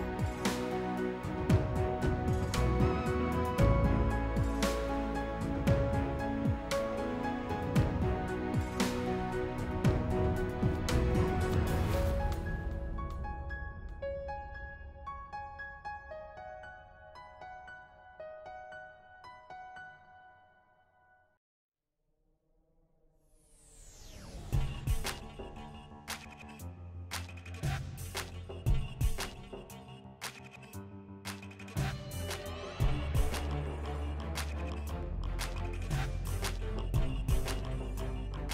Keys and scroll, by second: 37.9-38.5 typing.